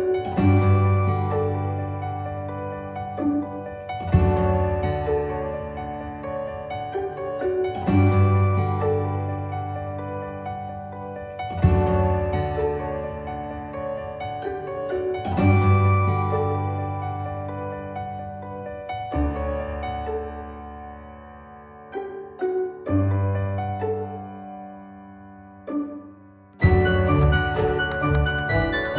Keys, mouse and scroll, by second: 0.0-5.4 drag, 7.3 right click, 8.5 click, 10.4 shift+click, 11.3 ctrl+g, 13.3-13.8 drag, 18.9 click, 19.6 click, 24.7-25.4 drag.